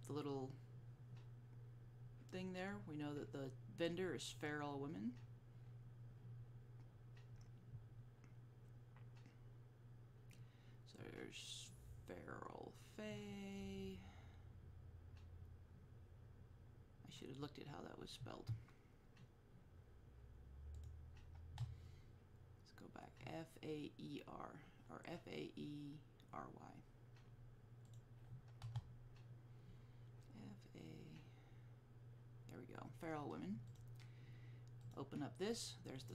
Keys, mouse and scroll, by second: 2.6-6.8 scroll down 1, 10.5-11.1 scroll down 1, 15.5-16.3 scroll up 1, 20.9 click, 28.0 click, 30.5-32.7 scroll up 1, 32.7-33.4 scroll down 1, 33.8 click.